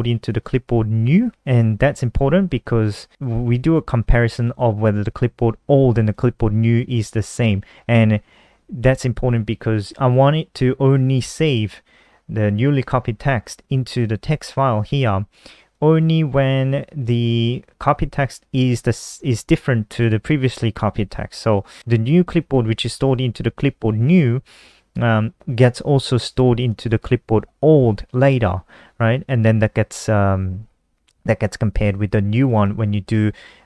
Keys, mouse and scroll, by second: 0.0 click, 4.0 click, 4.2 click, 5.7 click, 5.8 click, 15.4 click, 21.7 click, 22.5 click, 22.6 click, 26.3 click, 26.4 click, 32.0 click, 32.2 click, 33.4 click.